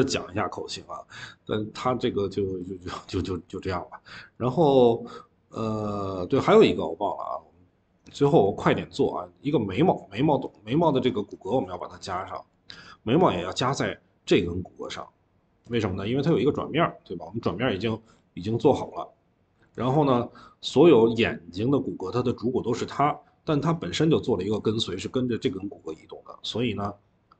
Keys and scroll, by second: 8.2 Escape, 9.0 Escape, 9.5 Escape, 10.2 v, 11.6 Escape, 19.6 ctrl+z.